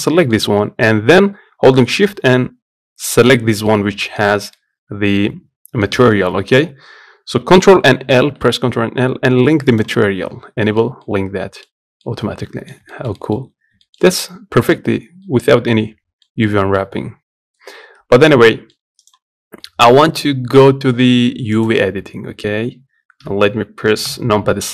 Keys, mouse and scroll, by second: 2.8 shift+click, 3.4-9.5 middle drag, 9.5 ctrl+l, 10.4 middle click, 10.5 scroll up 1, 10.7 middle click, 11.4 scroll up 1, 11.7-13.3 middle drag, 13.3 scroll up 1, 13.5-17.7 shift+middle drag, 17.7 Tab, 18.0 middle click, 18.8 click, 19.3-21.3 middle drag, 21.3 click, 23.8 KP_Divide.